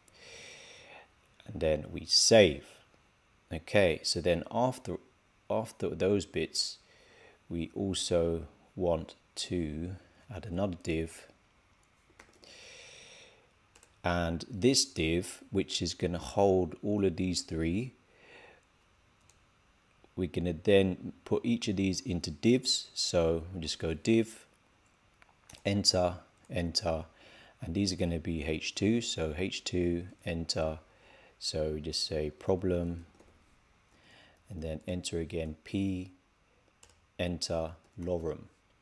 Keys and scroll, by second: 1.9 super+s, 32.1 shift+p.